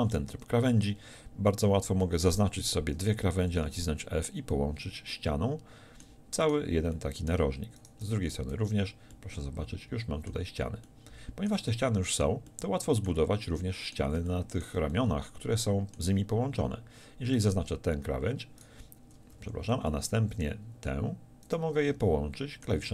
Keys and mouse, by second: 3.5 f, 8.2 f, 8.5 z, 19.9-22.9 drag.